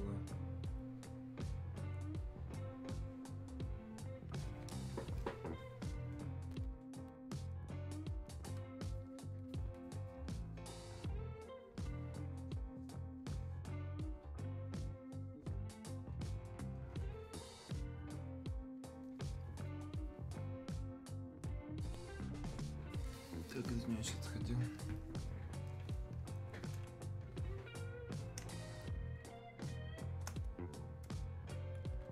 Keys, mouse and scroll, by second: 0.3 click, 28.4 space, 29.2 click, 29.3 space, 30.4-32.1 drag.